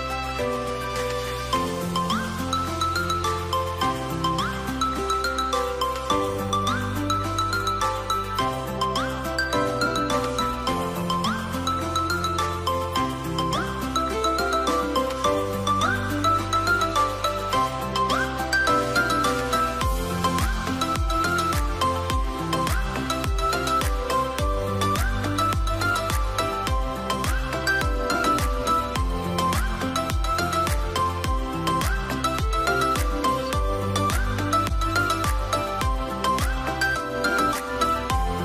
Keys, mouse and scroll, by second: 0.5 scroll down 1, 4.7 double click, 18.1 double click, 21.6 double click.